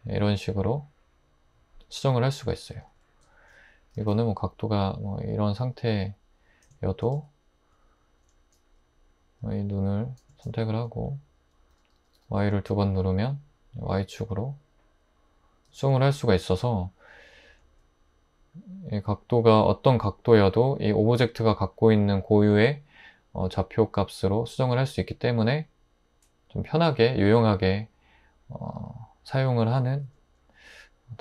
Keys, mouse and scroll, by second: 2.9 Tab, 4.0 typing, 7.1 Tab, 11.7-12.1 typing, 15.7 Tab.